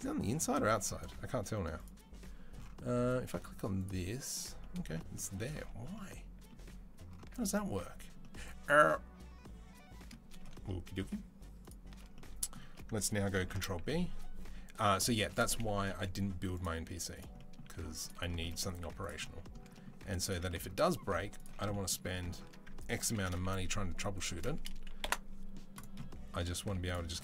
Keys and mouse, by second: 1.6 click, 1.7-3.6 middle drag, 3.6 click, 3.7-10.3 middle drag, 10.3-11.7 alt+shift+right drag, 11.7-24.8 shift+middle drag, 13.2 ctrl+b, 15.7 Delete, 16.7 z, 17.5 z, 18.6 z, 22.9 ctrl+b, 25.6-27.2 middle drag, 26.4 z, 27.1 Tab.